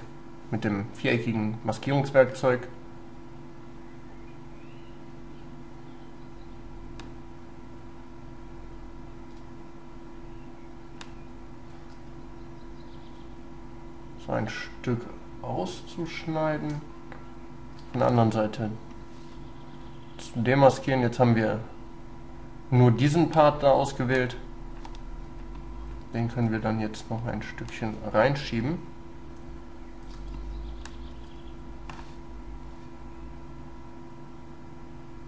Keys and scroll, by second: 6.8 ctrl+space.